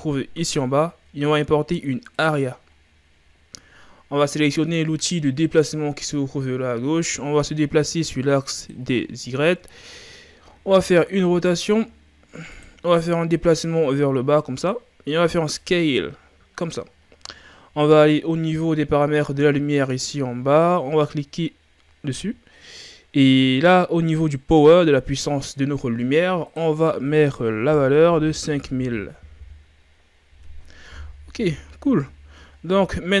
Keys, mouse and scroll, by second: 2.7-3.4 scroll down 3, 3.4-5.6 ctrl+scroll up 1, 5.6-9.4 drag, 9.4-9.8 shift+scroll down 2, 9.8 ctrl+scroll up 1, 10.6 r, 13.3-15.4 drag, 15.4 s, 20.5 click, 26.5-28.9 drag, 28.9 KP_0, 31.7-33.2 scroll down 7.